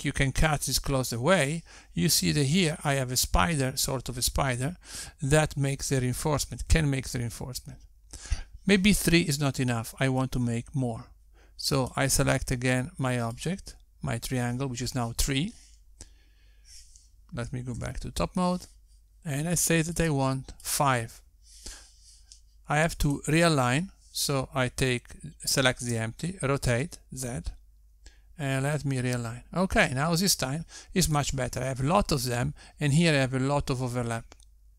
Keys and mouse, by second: 13.1 click, 14.5 click, 21.3 click, 22.0 click, 24.4 click, 27.1 r.